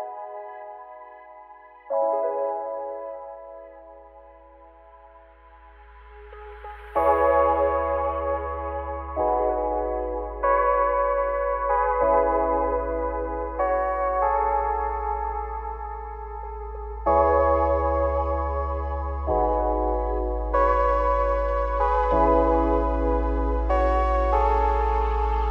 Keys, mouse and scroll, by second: 0.9 ctrl+z, 1.7 ctrl+b, 4.1 shift+middle click, 4.7 alt+e, 7.4 Tab, 7.6-8.8 scroll down 6, 8.8 ctrl+z, 9.0 ctrl+z, 9.2 ctrl+z, 9.5 ctrl+z, 10.1 click, 10.1 Tab, 10.5-11.3 scroll up 4, 11.3-11.8 scroll down 4, 11.8 click, 12.2-13.5 scroll down 2, 13.5 click, 13.7-14.7 scroll up 4, 14.7 click, 15.4-18.5 drag, 20.8 click, 21.2-21.7 scroll up 2, 21.7 click, 22.1-22.5 middle drag, 22.5-23.0 scroll up 4, 23.0 `, 23.7 click, 24.0-24.7 scroll down 8, 24.8-25.5 scroll up 4.